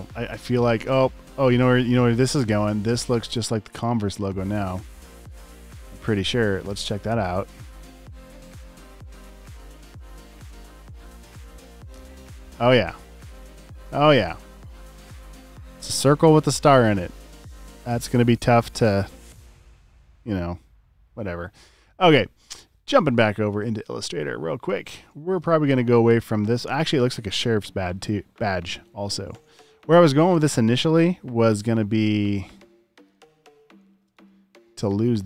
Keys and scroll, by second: 0.8-1.8 typing, 5.2 v, 7.4 typing, 24.9 v, 33.6-34.5 typing.